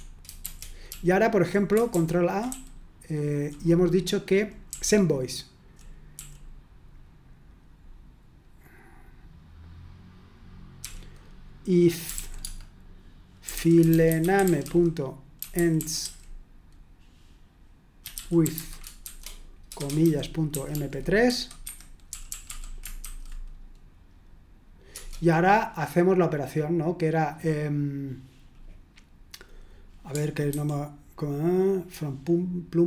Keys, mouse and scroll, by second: 0.0-0.2 typing, 0.9 Tab, 1.9 Escape, 3.2 shift+g, 5.3-6.1 typing, 10.8-16.5 typing, 17.8-23.0 typing, 24.9 Return, 30.5 super+2.